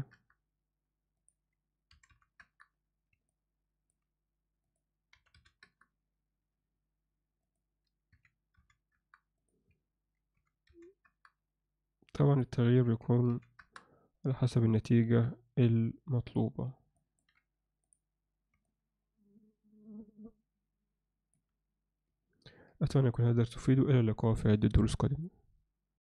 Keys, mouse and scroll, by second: 1.3-2.5 drag, 3.3 middle click, 4.6-5.7 drag, 7.5-9.0 drag, 9.3-11.1 drag, 12.5-13.6 drag, 14.7-16.4 drag, 17.0 ctrl+alt+middle click, 17.9 click, 18.7-21.4 alt+middle drag.